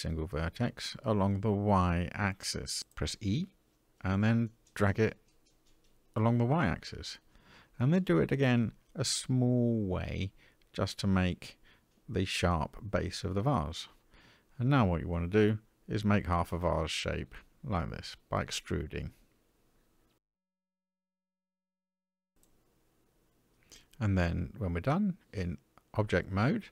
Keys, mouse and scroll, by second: 7.6 e, 14.5-18.5 typing, 19.4 shift+middle click, 20.0 e, 24.3 Tab.